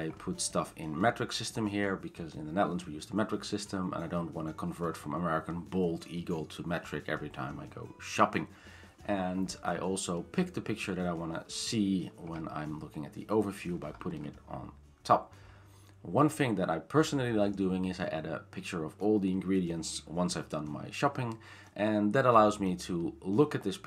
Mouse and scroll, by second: 0.2-0.7 scroll, 1.7-2.7 scroll down 10, 2.7-3.4 scroll, 3.4-3.7 scroll down 10, 4.7-5.2 scroll, 8.8-10.0 scroll, 10.0-11.7 scroll, 12.2 scroll, 13.4 scroll down 2, 13.8 scroll down 2, 14.1 scroll up 3, 14.3-14.9 scroll down 5, 15.4 scroll down 3, 16.0-16.5 scroll, 16.7-17.3 scroll down 10, 18.8 scroll.